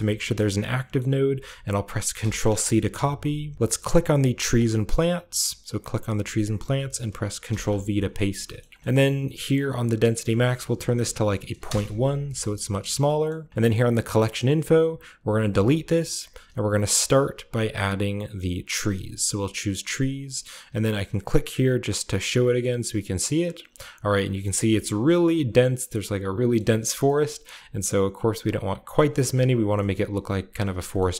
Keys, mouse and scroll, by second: 2.1 ctrl+c, 4.3 click, 5.6 click, 6.1-7.4 middle drag, 7.4 ctrl+v, 8.2 a, 8.6-9.9 scroll up 1, 9.9-11.6 drag, 9.9-10.9 scroll up 1, 10.9-11.6 typing, 11.6 Return, 13.3-15.4 scroll up 1, 13.5 middle click, 13.8-15.4 drag, 15.4 middle click, 15.5-16.8 drag, 16.8 middle click, 16.9 click, 17.6 typing, 19.3 click, 22.0 click, 23.4 click, 23.8 middle click, 24.0-24.9 drag, 24.7-25.4 middle drag, 24.9-26.5 scroll down 1, 26.5-27.1 middle drag, 27.1-28.7 scroll up 2, 28.9 middle click, 29.5 KP_0, 30.2-31.1 scroll down 1.